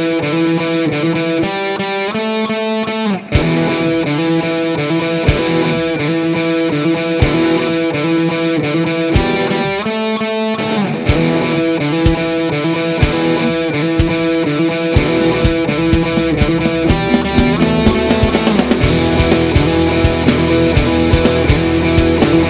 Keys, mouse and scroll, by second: 0.3 r, 1.2 s, 2.7 click, 3.6 Tab, 4.0 ctrl+r, 4.8 click, 5.6 ctrl+r, 8.2 click, 8.4 ctrl+r, 9.6 click, 9.8 ctrl+r, 10.8 click, 11.0 ctrl+r, 13.2 click, 13.5 ctrl+r, 14.2 click, 14.4 ctrl+r, 14.8 click, 15.4 click, 15.8 s, 16.6-18.2 drag, 17.3 s, 18.4 click, 19.0 s, 19.3 click, 19.5 click, 19.9 g, 20.9-22.4 drag.